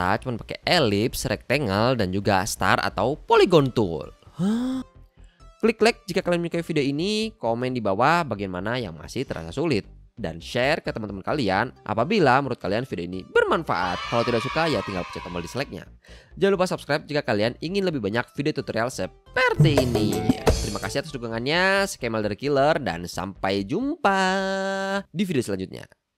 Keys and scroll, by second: 0.2 i, 0.8 v, 1.5 m, 3.2 i, 3.8 shift+super+v, 4.1 BackSpace, 6.0 shift+super+g.